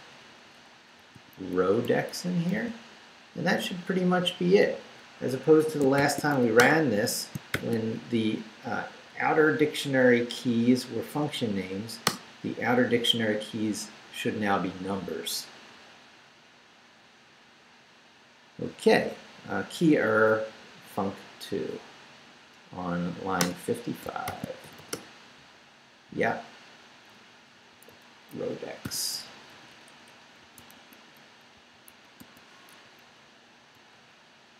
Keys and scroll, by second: 0.0-3.0 typing, 5.4 Escape, 5.9 shift+;, 6.3 shift+w, 6.6 Return, 7.3 shift+Return, 7.5 shift+;, 8.1 shift+Up, 12.0 Return, 23.4 Return, 24.0 shift+Return, 24.2 shift+;, 24.6 shift+5, 24.9 Return, 26.1 Right, 28.8 i, 29.2 BackSpace, 30.4-32.7 typing, 32.8 Down, 33.7 Left.